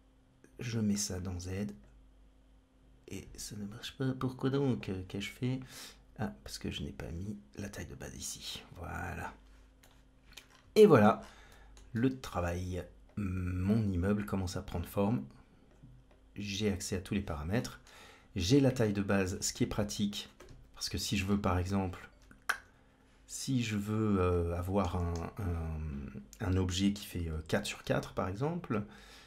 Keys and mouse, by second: 0.8-1.7 drag, 6.5-7.8 drag, 9.8-10.3 middle drag, 10.8 shift+middle click, 11.5 shift+middle click, 11.9 middle click, 13.0-14.1 drag, 14.7 click, 15.9-17.1 drag, 17.6 shift+middle click, 19.9 click, 20.3 KP_Decimal, 21.6 Tab, 22.4 a, 25.6 KP_1.